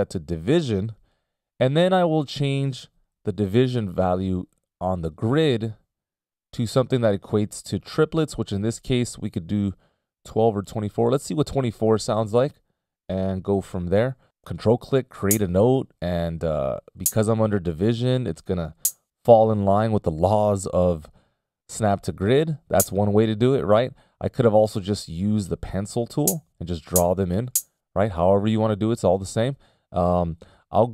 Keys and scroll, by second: 1.6 ctrl+alt+super+m, 3.6 ctrl+alt+super+m, 13.9 ctrl+alt+super+m, 24.3 super+z, 24.9 super+z.